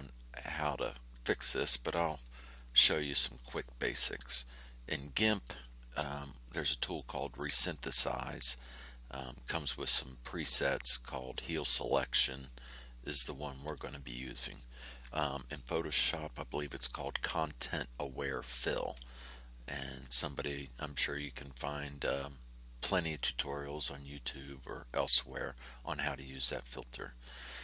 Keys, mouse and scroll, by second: 0.5 ctrl+scroll up 2, 1.6 ctrl+middle click, 2.5 ctrl+scroll down 2, 3.0 ctrl+middle click, 4.3 middle click, 4.6-5.6 drag, 22.3 click, 26.5 click, 27.4 middle click.